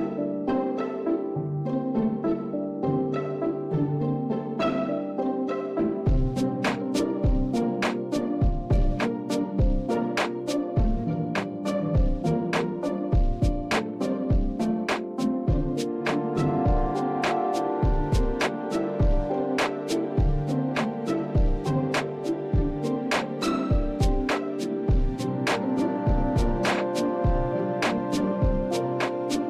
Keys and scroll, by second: 4.5 alt+Tab, 7.7 typing, 10.6-13.9 typing, 15.2-19.6 typing, 27.1 ctrl+a, 29.0-29.4 Right.